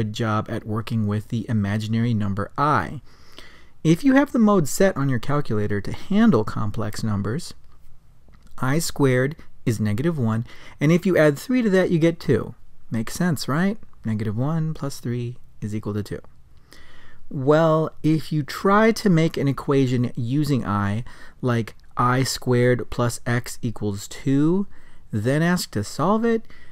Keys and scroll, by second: 2.4 Down, 5.5 Right, 6.6 Return, 9.4 ., 10.1 Return, 11.1 ., 12.2 3, 12.5 Return, 16.4 Up, 16.9 Return, 18.6 ., 19.9 x, 20.3 Down, 20.8 2.